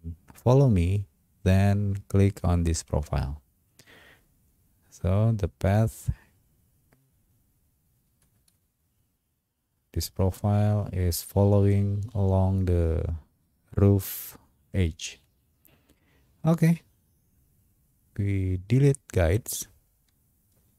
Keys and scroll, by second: 8.4 space.